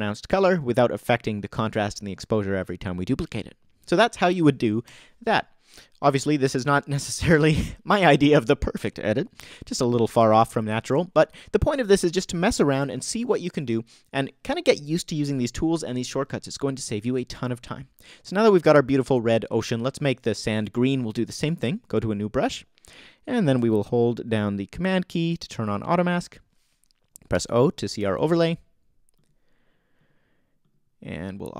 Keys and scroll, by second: 4.8 BackSpace, 27.3 super+o, 28.3 super+o.